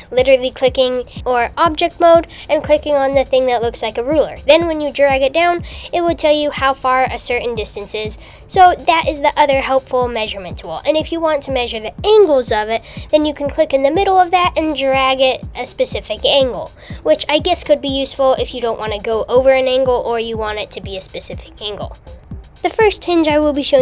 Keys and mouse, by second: 1.0 KP_1, 2.4 click, 5.7-11.7 drag, 14.0-19.9 drag, 21.4 x, 23.3 click, 23.7 x.